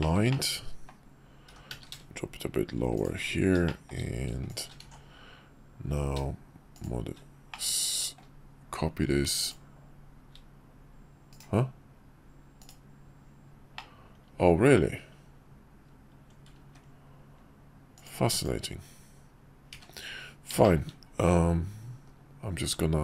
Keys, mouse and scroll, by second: 0.0 shift+middle click, 0.3 middle click, 1.5 g, 3.7 shift+middle click, 4.5 shift+click, 4.8 alt+x, 6.7 shift+click, 7.5-8.2 middle drag, 9.4 shift+click, 13.7-14.8 middle drag, 16.6 ctrl+`, 20.6 shift+drag, 22.0 KP_5.